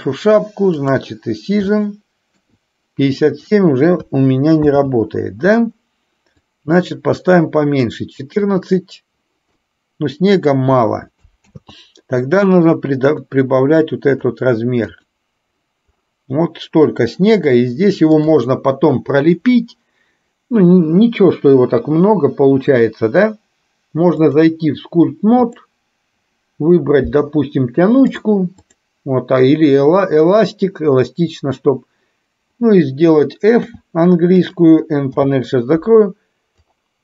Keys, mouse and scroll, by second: 0.8 click, 1.8-2.4 shift+middle drag, 4.7 ctrl+z, 6.6 click, 8.4 click, 9.6-10.6 middle drag, 11.6 ctrl+z, 13.2-14.3 drag, 15.1 click, 17.6-18.3 middle drag, 24.2-25.8 drag, 33.6 f, 35.2 n, 36.7-37.0 drag.